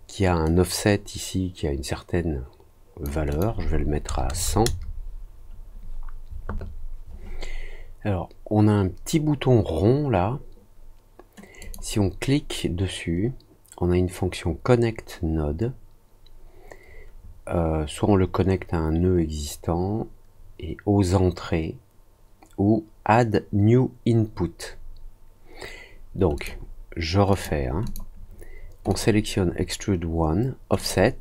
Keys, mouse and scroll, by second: 0.4-3.0 drag, 3.2 click, 11.5 click, 26.3 click, 27.2 click, 27.8 click, 28.8 click, 30.7 click.